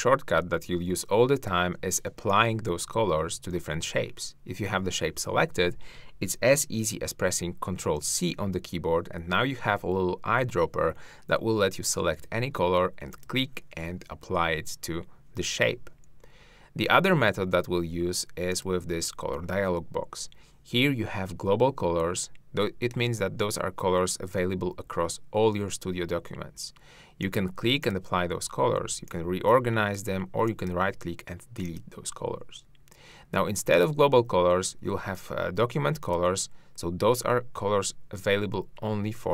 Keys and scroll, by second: 2.2 shift+r, 7.8 ctrl+c.